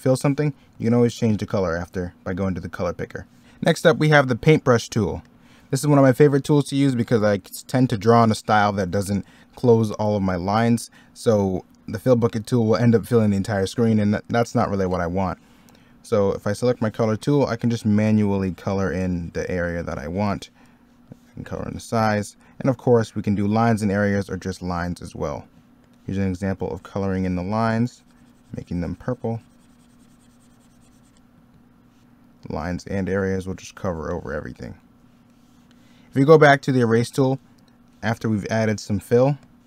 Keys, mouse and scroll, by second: 5.8 middle click, 8.8 middle click, 9.2-10.0 scroll up 1, 11.1 middle click, 15.0 middle click, 25.1 ctrl+z, 31.3 ctrl+z, 34.4 ctrl+z, 34.7 middle click, 37.7 middle click.